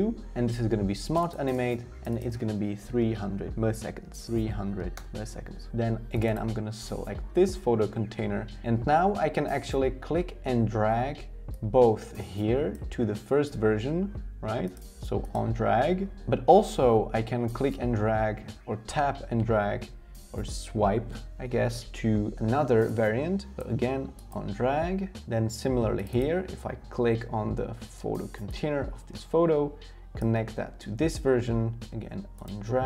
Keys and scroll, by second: 2.6-4.7 typing.